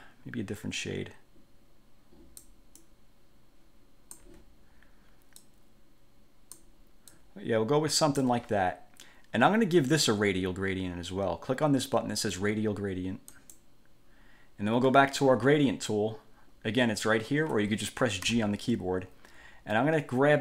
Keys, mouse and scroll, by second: 3.0-4.6 drag, 5.6-6.9 drag, 7.3-8.6 drag, 13.5 click, 18.5 g.